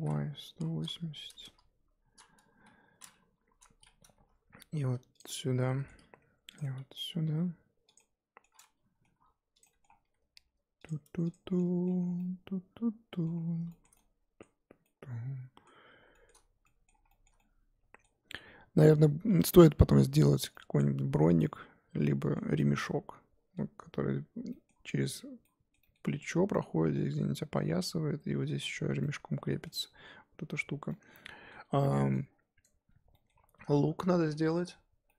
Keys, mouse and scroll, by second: 3.3 KP_7, 3.7-4.1 scroll up 2, 4.1 r, 5.3 middle click, 6.0 r, 6.6 middle click, 7.3 g, 8.0-9.2 middle drag, 9.2 r, 9.6 middle click, 10.0 g, 11.3 click, 11.4 scroll down 4, 11.5 middle click, 12.0 scroll down 1, 12.2-13.3 middle drag, 13.3-13.7 scroll up 2, 13.7-15.8 shift+middle drag, 15.8-16.6 scroll up 5, 16.1 shift+middle click, 16.6-20.8 middle drag, 20.8-21.4 scroll down 1, 21.4-35.1 middle drag.